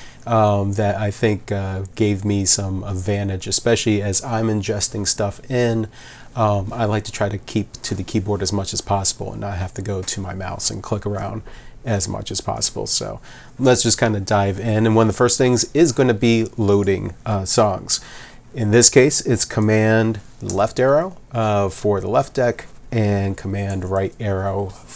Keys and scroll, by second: 16.0 8, 20.5 super+Left, 23.7 super+Right.